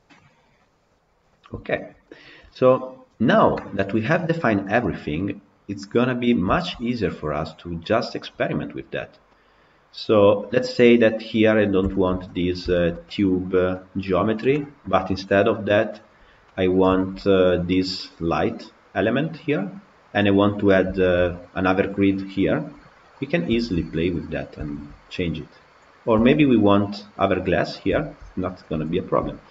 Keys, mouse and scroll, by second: 0.0 scroll down 1, 0.0-1.1 middle drag, 1.1-1.6 scroll down 1, 1.6-6.0 shift+middle drag, 6.0-6.4 scroll up 1, 6.4-11.2 shift+middle drag, 11.2-11.6 scroll up 3, 11.8-12.3 shift+middle drag, 12.3 scroll up 3, 12.6-15.8 shift+middle drag, 15.8-16.4 scroll down 5, 16.4-17.3 middle drag, 17.3-17.9 scroll up 1, 19.1 scroll down 4, 19.4-20.4 middle drag, 20.4-20.9 scroll up 2, 20.9-22.9 shift+middle drag, 22.9 scroll down 2, 23.0-23.6 middle drag, 23.6-23.9 scroll down 3, 23.9-24.3 middle drag, 24.3 scroll up 1, 24.5-25.2 shift+middle drag, 25.2 click, 26.1 shift+middle drag, 26.4 scroll up 2, 27.8-28.4 shift+middle drag, 28.4 click, 29.0 Tab, 29.3 shift+middle click.